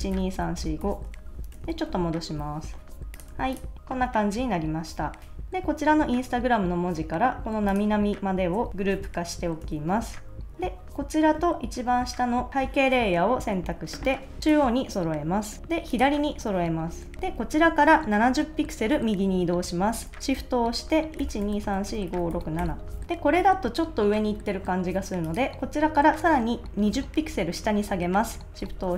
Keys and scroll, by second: 1.5 super+-, 3.3 super+s, 8.8 super+g, 9.6 super+s, 21.2 shift+Right, 23.0 super+s.